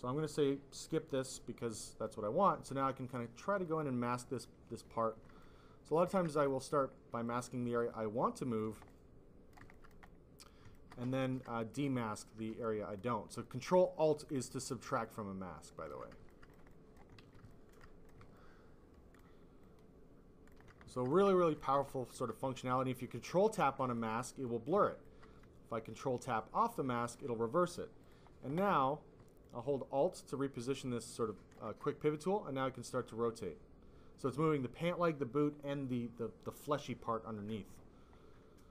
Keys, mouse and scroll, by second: 1.0 click, 1.6 click, 2.0 ctrl+click, 5.3 click, 6.3 click, 6.6 click, 7.2 ctrl+click, 9.8 click, 10.0 click, 11.3 alt+click, 11.7 click, 12.1 ctrl+click, 13.6 ctrl+alt+click, 14.8 ctrl+alt+click, 16.4 alt+click, 16.6 click, 17.3 ctrl+alt+z, 17.7 click, 18.3 ctrl+alt+click, 19.1 click, 20.0 ctrl+alt+click, 21.2 click, 21.9 alt+click, 23.9 alt+click, 24.4 click, 25.0 alt+click, 25.8 ctrl+click, 26.0 ctrl+click, 26.5 click, 27.9 click, 28.2 click, 29.3 alt+click, 32.1 click.